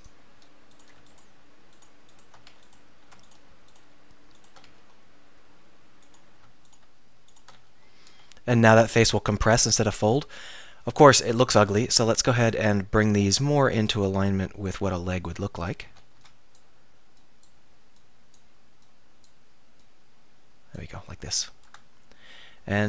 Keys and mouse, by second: 2.5 right click, 2.5 f, 4.7 f, 7.6 f, 8.3 middle click, 10.2 KP_1, 10.4 KP_3, 11.6 a, 12.0 z, 12.6 b, 13.2-14.9 drag, 16.0 a, 16.2 b, 18.1 click, 21.8 Tab.